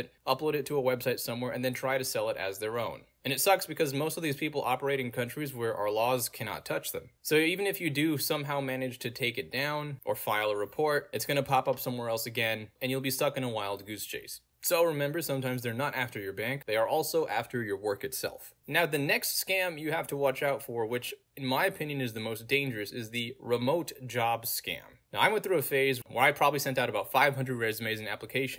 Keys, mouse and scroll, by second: 0.2-1.1 scroll down 1, 2.0 middle click, 2.0 scroll down 2, 3.5-6.4 middle drag, 3.5-4.7 scroll down 2, 4.7-5.2 scroll down 1, 5.2-6.4 scroll down 1, 6.6-9.8 middle drag, 6.6-9.3 scroll down 2, 9.3-9.8 scroll down 1, 9.8-11.0 scroll down 1, 11.0-13.1 scroll down 1, 13.1-13.8 scroll down 1, 13.8-15.3 scroll down 1, 15.3-16.7 scroll down 1, 16.7-17.3 scroll down 1, 17.3-17.9 scroll down 1, 18.9 scroll down 2, 21.5 click, 23.3 Return, 24.3 click, 26.8 click.